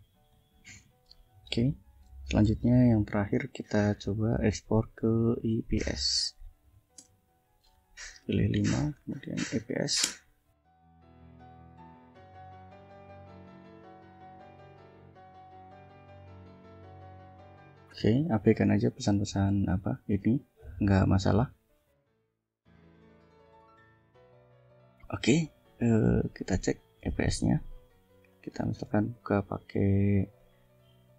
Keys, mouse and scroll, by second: 0.1 click, 2.3 ctrl+l, 4.2 click, 5.0 click, 6.2 Up, 6.9 Return, 8.1-10.0 typing, 8.5 Return, 20.5-21.5 drag, 22.1 click, 22.6 scroll down 2, 25.4 click, 25.8 click, 26.7 click, 27.5 ctrl+scroll down 2, 28.3 ctrl+click, 28.5 right click, 30.3 click.